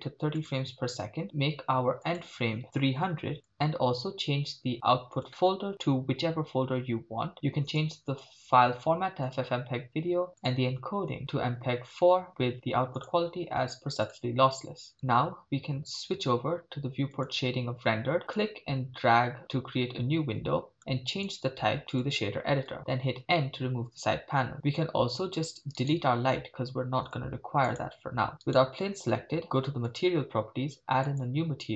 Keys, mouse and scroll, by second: 2.0-3.5 drag, 3.5 0, 4.4-5.1 scroll down 2, 5.1 scroll down 2, 5.2-7.8 drag, 5.7 /, 8.0-9.4 drag, 9.9-10.4 scroll down 2, 10.4 click, 10.7-11.2 scroll down 2, 11.2-12.1 drag, 12.3 scroll down 1, 13.0-14.2 drag, 17.4 click, 18.4-20.8 drag, 21.1 click, 23.3 n, 26.0 click, 26.0 right click, 26.8 x, 28.6-30.0 drag, 28.6 right click, 31.0 click.